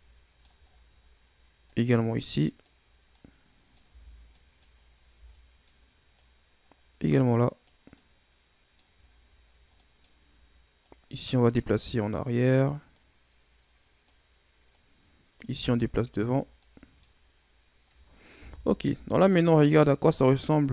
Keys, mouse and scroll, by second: 0.6-1.0 scroll down 3, 1.0 scroll up 1, 1.6 right click, 3.1 middle click, 3.7 Tab, 4.3-4.7 middle drag, 4.7 scroll up 2, 5.0 Tab, 5.2 middle click, 6.1 right click, 7.9-9.0 middle drag, 9.0-9.4 scroll down 4, 9.4-9.7 scroll up 1, 9.7-10.7 middle drag, 10.7 right click, 12.9 right click, 14.7 right click, 15.5 Tab, 15.7-16.5 scroll down 5, 16.5-18.3 middle drag, 18.3 KP_1, 18.8 a, 19.3-20.1 scroll down 2, 20.1-20.7 scroll up 4.